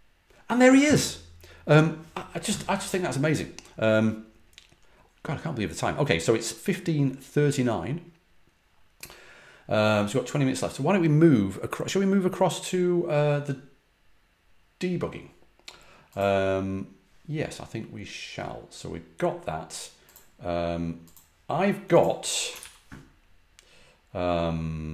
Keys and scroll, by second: 22.5 ctrl+c.